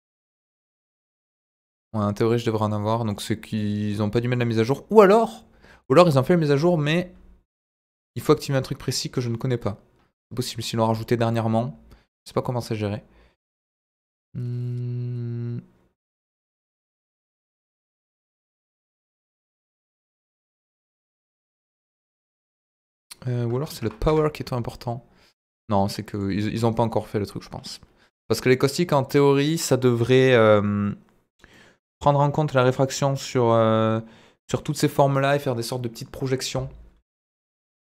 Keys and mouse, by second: 0.5 click, 2.7 middle click, 3.5 middle click, 4.3 click, 5.1 middle click, 10.9 middle click, 12.1 click, 16.4 click, 17.9 click, 18.5 click, 19.0 click, 20.5 click, 22.8-24.5 drag, 26.1 click, 28.5 click, 30.0 click, 31.5-32.3 middle drag, 37.2 z.